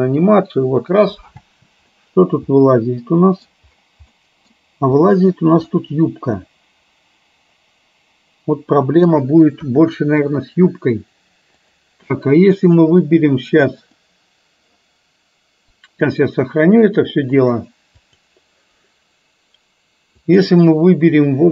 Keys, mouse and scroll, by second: 1.4 space, 2.1-3.6 middle drag, 4.3 middle click, 5.1 click, 5.8-9.1 middle drag, 9.7 KP_1, 11.8 click, 13.9 click, 15.8-19.3 drag, 20.3 click.